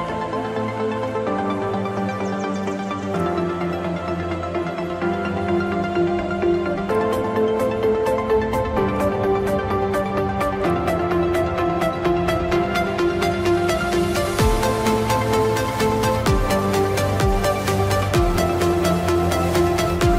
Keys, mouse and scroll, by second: 0.4 middle click, 2.8-3.9 scroll down 1, 3.9 middle click, 4.6 click, 6.4 F2, 6.7 click, 9.8 right click, 10.8 click, 13.0 middle click, 13.7 click, 16.7 p, 19.9 click.